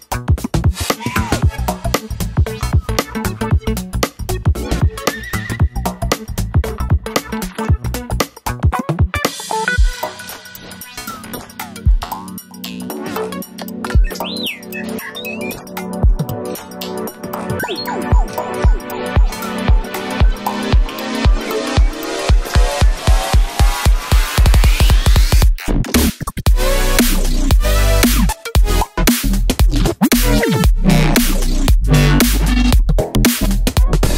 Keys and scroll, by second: 0.1 super+z, 0.6 Right, 2.6 Right, 3.1 Left, 3.3 Right, 8.2 Right, 20.4 Left, 20.5 Left, 20.8 Left, 20.9 Up, 24.4 super+z, 24.6 super+z, 24.9 super+z, 25.4 super+z.